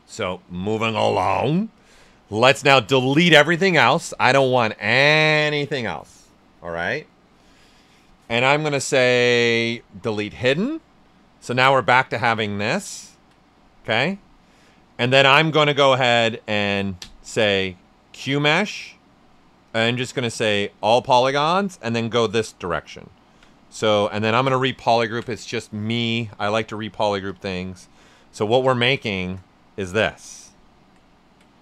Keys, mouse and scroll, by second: 2.6-10.2 drag, 10.9 right click, 12.0 right click, 16.9 space, 21.8-26.5 drag, 26.5 click, 28.5 ctrl+right click, 29.1 shift+f, 29.4 shift+right click, 31.0 ctrl+right click.